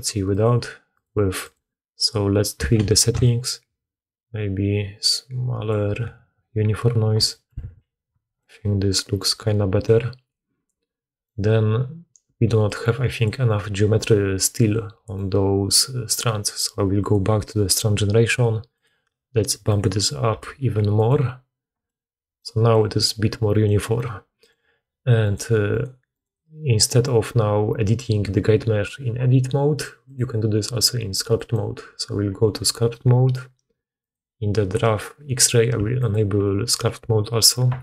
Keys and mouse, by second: 0.2 click, 0.8 click, 1.3 click, 3.2-13.1 shift+drag, 7.5 alt+a, 12.3-13.3 d, 13.3 click, 13.3-17.0 middle drag, 13.3 right click, 14.0-24.5 drag, 14.0-17.0 right drag, 14.0 d, 18.8-21.1 middle drag, 18.8-21.1 right drag, 24.5 middle click, 25.1 click, 25.2 middle click, 25.6 click, 25.7 middle click, 26.0 click, 26.1-30.1 middle drag.